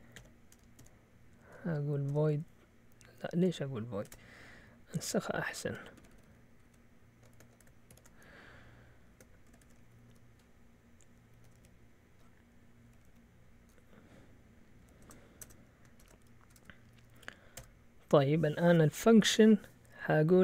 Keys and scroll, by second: 0.2 Escape, 0.8 a, 1.8-3.3 typing, 4.0 Escape, 6.0 ctrl+w, 6.1 ctrl+w, 6.2 ctrl+w, 7.9 shift+y, 9.4 ctrl+w, 10.1 p, 11.3 Up, 11.4 typing, 12.8 typing, 13.1 End, 14.8-17.6 typing, 16.4 Return, 16.9 Up, 17.6 Tab.